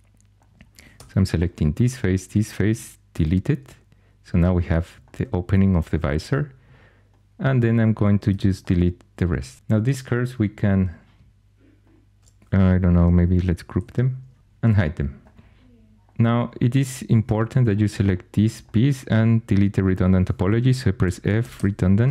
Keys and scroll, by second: 0.9 3, 3.0 shift+x, 8.2 shift+x, 13.7 ctrl+g, 17.2 4, 20.7-21.9 typing.